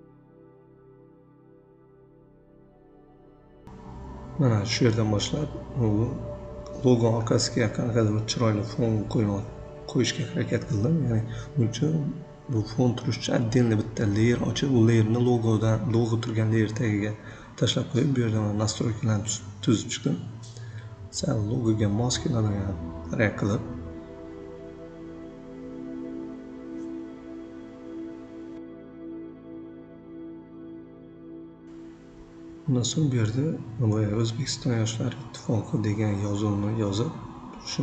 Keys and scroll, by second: 4.8 ctrl+g, 10.8 v, 19.9 ctrl+c, 20.4 ctrl+v, 21.4 Delete, 31.1-34.8 typing, 32.4 Caps_Lock.